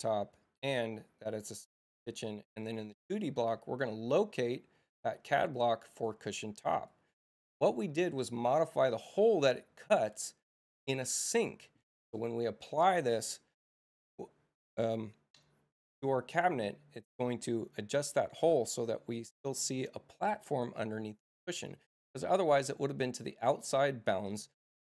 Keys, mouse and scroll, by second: 1.4 click, 2.5 click, 5.5 click, 6.7 click.